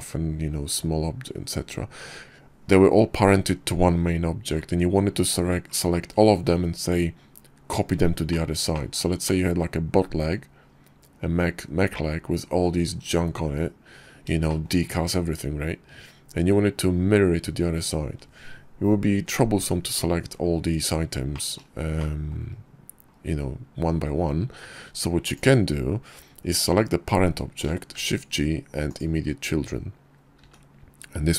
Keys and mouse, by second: 7.8 click, 8.3 shift+drag, 8.8 click, 14.0 shift+middle click, 20.8 middle click, 21.5-21.8 shift+drag, 27.4 shift+g, 29.9 g.